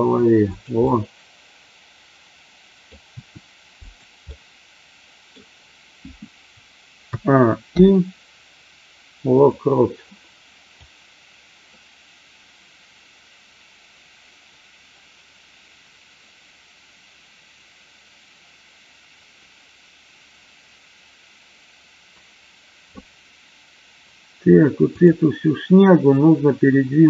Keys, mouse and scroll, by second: 0.6 click, 0.8-2.9 middle drag, 3.1 r, 3.8 click, 4.3 middle click, 7.1 a, 7.7 i, 10.8-23.0 drag, 24.8 click.